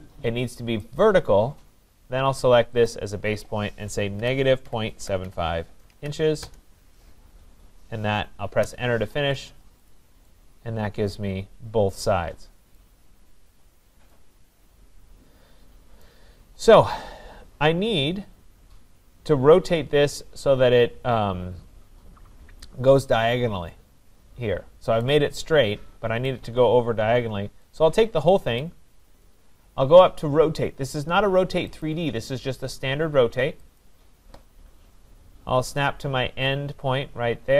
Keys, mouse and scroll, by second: 1.0 click, 2.9 click, 4.0-6.4 typing, 6.5 Return, 8.6 Return, 9.4-9.8 scroll, 9.9 click, 10.5 middle click, 12.8 right click, 12.9-13.3 scroll down 8, 15.1 middle click, 16.1 right click, 19.6-21.1 right drag, 26.3 right click, 28.6 click, 31.8 click, 33.8 click, 35.0-35.6 scroll.